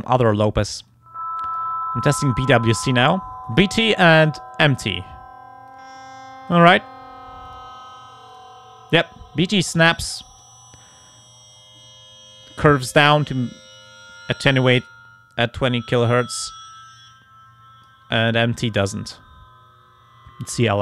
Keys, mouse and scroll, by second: 0.9 click, 2.9 click, 4.2 click, 5.7-6.8 drag, 7.5 click, 8.3 click, 9.8 click, 11.8 click, 14.7-18.1 drag, 18.7 click, 20.6 click.